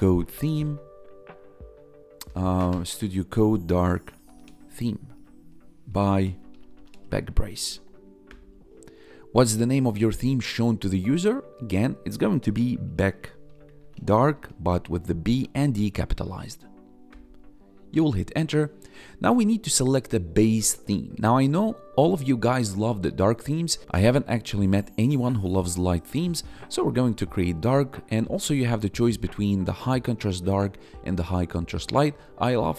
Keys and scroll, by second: 0.0-0.6 typing, 2.5 ctrl+Left, 3.8-4.4 typing, 4.9 ctrl+Right, 5.4-7.8 typing, 8.2 Return, 12.8-14.3 typing, 17.0 Return, 28.2 Down, 28.9 Up, 30.8 Down.